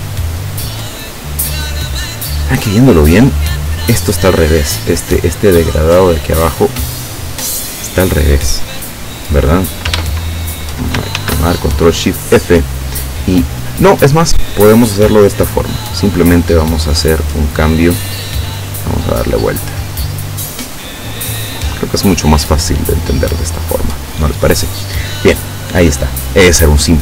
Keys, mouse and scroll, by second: 6.3 click, 7.2 click, 8.8 scroll down 2, 11.2 ctrl+shift+f, 14.3 click, 15.6 click, 16.9-17.9 drag, 18.6-20.8 drag, 21.5-23.7 drag, 26.2 click.